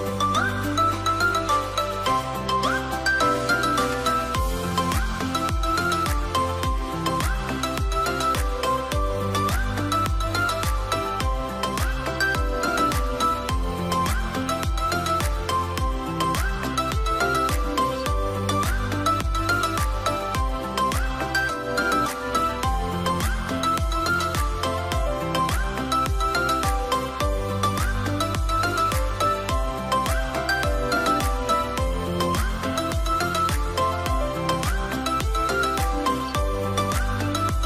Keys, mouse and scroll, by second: 29.2 scroll up 1, 29.3 scroll down 1.